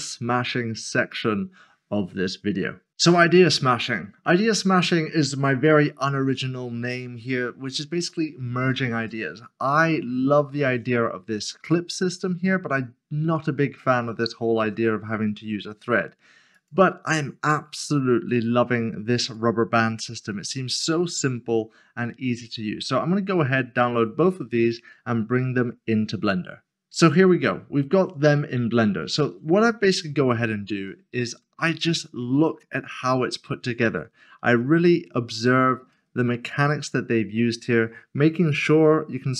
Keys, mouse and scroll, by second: 16.5-17.0 scroll down 1, 17.0 click, 26.9 click, 27.9 scroll up 1, 29.9 shift+middle click, 31.4 middle click, 32.6 shift+middle click, 33.2 scroll up 1, 33.6 shift+middle click, 35.1-35.9 scroll down 1, 35.9 middle click.